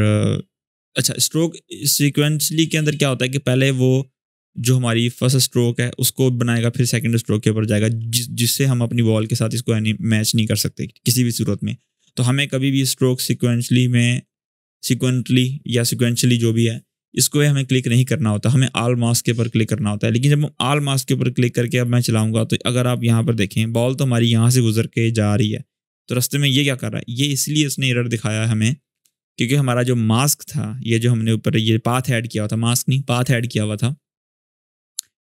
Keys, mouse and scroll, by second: 1.8 click, 4.8-7.6 drag, 7.7-8.4 scroll down 1, 17.6 click, 21.3-23.5 drag.